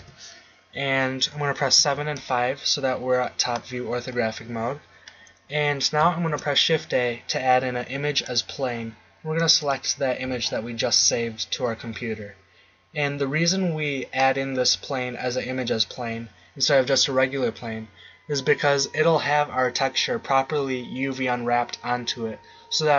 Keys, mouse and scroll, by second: 1.7 KP_7, 2.2 KP_5, 6.3 shift+a.